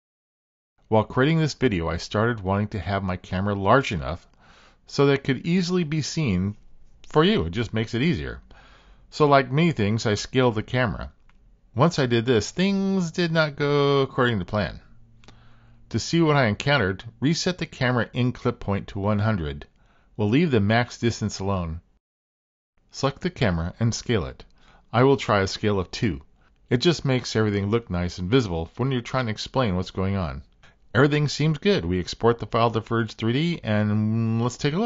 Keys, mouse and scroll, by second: 1.5 click, 2.6 s, 17.4-19.1 drag, 25.2 click, 26.8-29.1 drag, 30.3-33.3 drag.